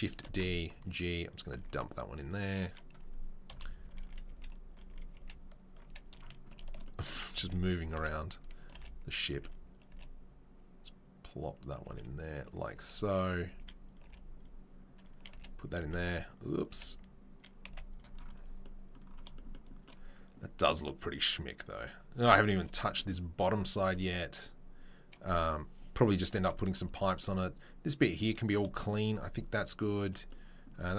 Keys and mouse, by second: 0.1 shift+d, 1.7 s, 3.5 KP_3, 3.9 ctrl+KP_1, 4.2 ctrl+KP_3, 4.8 KP_1, 5.1 KP_3, 7.3 s, 7.8 right click, 8.1-30.9 right drag, 8.7 g, 9.3 s, 9.9 g, 11.8 s, 13.5 s, 14.0 g, 15.3 g, 15.7 s, 16.7 g, 17.6 z, 30.0 drag, 30.0 middle drag.